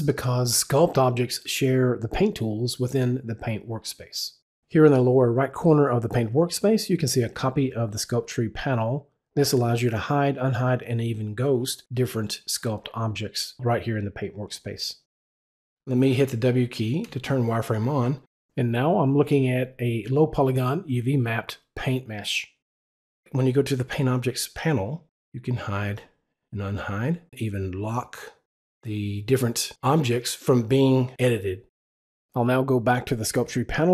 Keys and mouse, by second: 10.3 click, 17.0 click, 17.5 w, 25.1 click, 26.1 click, 27.8 click, 29.1 click, 32.1 click, 33.1 click.